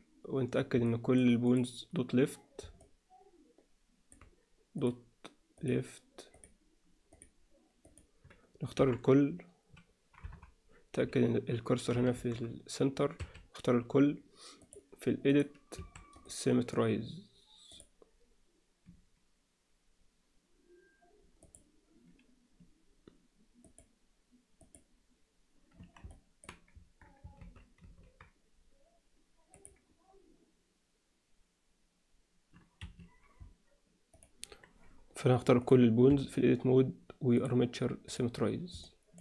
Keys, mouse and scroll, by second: 0.9 middle drag, 2.8-4.1 alt+middle drag, 4.7 click, 7.1 click, 8.7 KP_1, 10.2 KP_3, 12.1 shift+c, 13.2 a, 14.7-15.4 drag, 15.7 a, 16.2-17.8 right drag, 21.5-23.9 drag, 24.6 click, 26.1 alt+middle click, 27.4 ctrl+z, 27.8 ctrl+z, 29.5-33.0 drag, 34.3 alt+a, 35.6 click, 36.0 a, 37.4 click, 38.8 middle click.